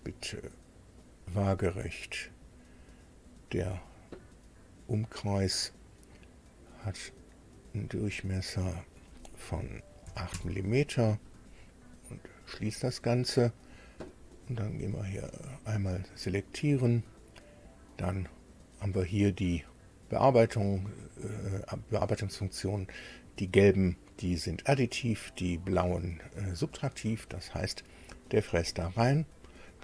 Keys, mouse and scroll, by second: 1.0 click, 3.1 click, 7.7 click, 8.5 click, 10.1 KP_8, 10.3 KP_Enter, 12.1 click, 14.7 click, 15.3 click, 27.3 click, 29.5 click.